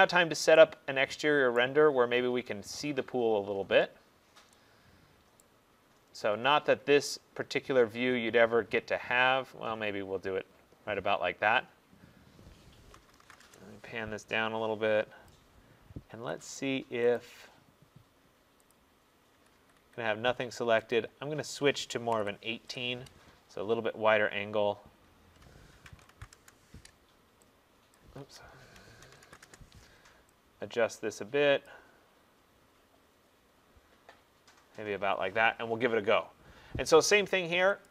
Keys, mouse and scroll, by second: 0.2-1.6 scroll, 1.6 right click, 1.9-2.7 scroll, 3.2-4.7 scroll, 4.7-5.0 scroll, 5.5 right click, 5.8 scroll, 6.5 scroll, 7.4-7.9 scroll, 8.2 middle click, 8.8 middle click, 9.5 middle click, 13.0-13.5 typing, 15.4 click, 16.2 Escape, 17.2 click, 18.8 click, 19.4 Escape, 19.6 Escape, 19.9 Escape, 21.0 click, 22.1-22.7 typing, 23.9 middle click, 25.7-26.4 typing, 28.0 click, 28.3 Escape, 29.1-29.5 typing, 30.4 Return, 31.7 click, 33.3 middle click.